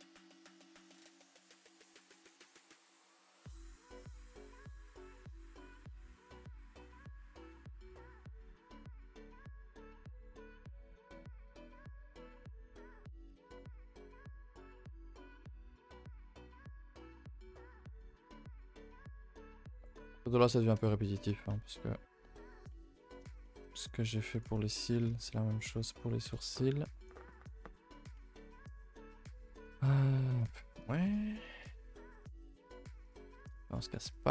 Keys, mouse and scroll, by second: 1.1 l, 1.5 x, 2.4 alt+h, 2.7 scroll down 2, 2.8 a, 2.9 a, 3.0 middle click, 3.8 Tab, 4.6 click, 5.0 scroll down 2, 5.1-6.5 middle drag, 6.5 alt+h, 7.4 click, 7.9 KP_0, 8.7 middle drag, 9.0-9.6 scroll up 4, 9.1 Tab, 9.3 middle click, 9.8-10.5 shift+middle drag, 10.5-11.1 scroll up 6, 11.1 3, 11.5-13.7 shift+middle drag, 13.7 l, 14.0-16.0 middle drag, 16.0 r, 17.5 r, 18.9 g, 19.9 r, 20.4 g, 21.2 r, 22.7-24.4 middle drag, 24.4 Tab, 24.7 middle drag, 24.9 a, 25.0 a, 25.1-26.2 scroll down 4, 25.3-25.7 middle drag, 26.2 KP_0, 29.3 shift+middle click, 29.6 scroll up 2, 29.9-30.5 scroll down 2, 30.2 shift+middle click, 30.5 Tab, 30.7 n, 31.0 middle click.